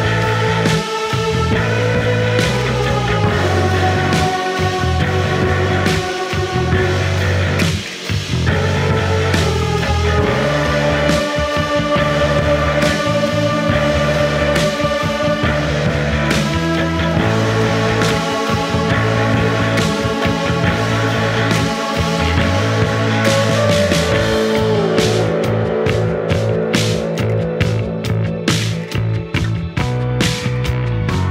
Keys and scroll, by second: 1.5-2.4 typing, 6.9 4, 11.2 F9, 12.0 3, 19.2 Escape, 25.4 ], 26.9-28.4 typing, 29.9 4.